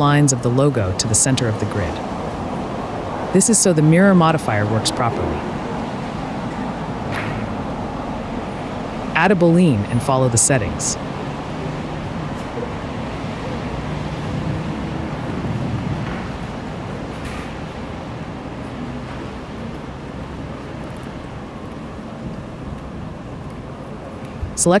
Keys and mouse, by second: 0.3 KP_Decimal, 1.1 middle click, 1.8 middle click, 2.9 g, 3.0 z, 4.8 middle click, 5.3-6.6 middle drag, 7.2 drag, 7.6 click, 8.2-9.5 drag, 9.5-10.2 middle drag, 11.1 middle click, 11.9 middle click, 13.1 middle click, 14.0-15.4 middle drag, 14.8 BackSpace, 18.7-20.2 drag, 19.5 ctrl+z, 23.3 click, 23.8 /.